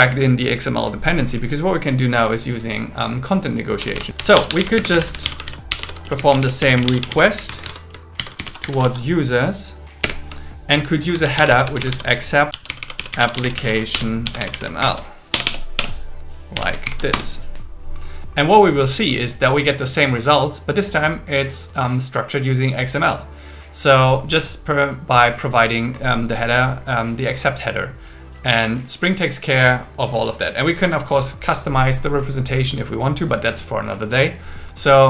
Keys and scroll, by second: 4.8-7.1 typing, 8.2 shift+7, 10.0 space, 11.1 shift+a, 14.0-15.4 typing, 17.0 shift+#, 17.1 Return.